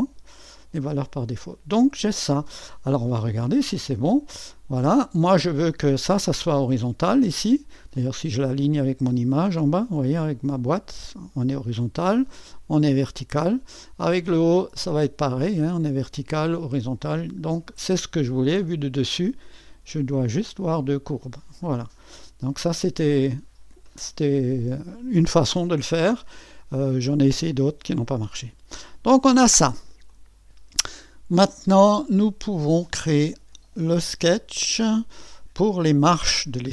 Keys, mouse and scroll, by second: 0.0-3.5 drag, 3.5 1, 4.7-7.1 drag, 8.0-18.0 drag, 18.6 2, 20.2-22.1 scroll up 1, 22.1 1, 25.2-34.3 drag, 28.3-29.4 scroll down 1, 29.4-30.1 scroll down 1.